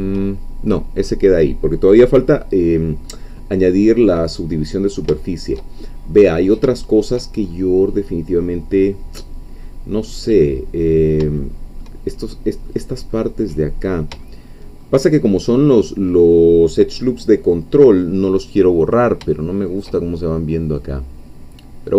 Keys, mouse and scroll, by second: 0.7-1.3 scroll down 2, 1.6 scroll down 2, 2.2-3.2 drag, 3.3-5.8 drag, 5.8-6.1 shift+scroll up 1, 6.1-6.7 scroll down 1, 6.7 shift+click, 7.4-7.9 shift+scroll up 1, 9.0 scroll down 1, 9.6-10.1 scroll up 2, 10.3 scroll down 2, 11.4 shift+middle click, 12.1-12.7 shift+scroll up 3, 12.7 middle click, 14.3 shift+middle click, 18.8-19.2 scroll down 2, 19.3 shift+middle click, 20.8-21.9 middle drag.